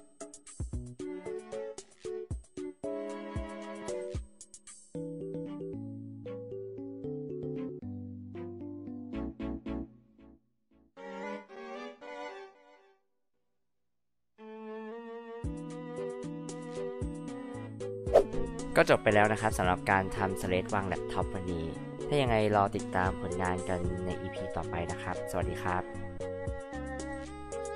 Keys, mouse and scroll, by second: 1.0-1.4 drag, 2.1-3.5 drag, 6.6-7.5 drag, 7.0-7.5 right drag.